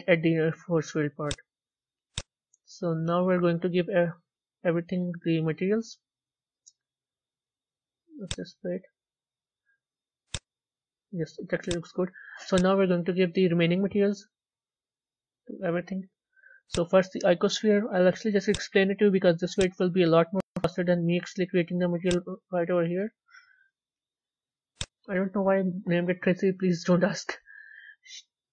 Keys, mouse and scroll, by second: 1.0 click, 2.0-4.7 drag, 4.7 z, 5.4-6.4 middle drag, 6.4 z, 8.2 click, 8.8-10.0 middle drag, 10.0 click, 11.5 click, 12.4-14.6 drag, 14.6 z, 15.3-15.9 middle drag, 15.9-16.2 scroll down 2, 16.4 click.